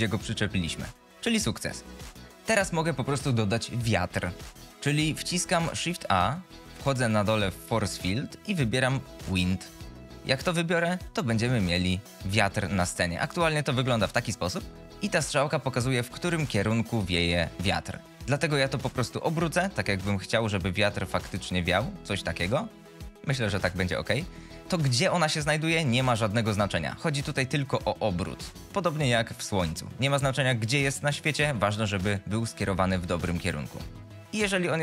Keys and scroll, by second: 1.4 space, 2.4 shift+Left, 4.7 F22, 6.1 shift+a, 13.1 g, 18.1 r, 22.8 g.